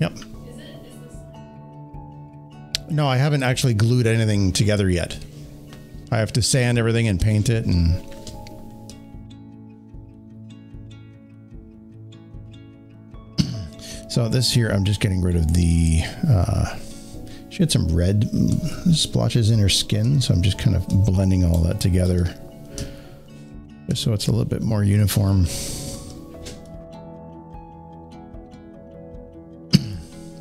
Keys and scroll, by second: 12.0 space, 12.2 space, 28.2 space, 28.3 space.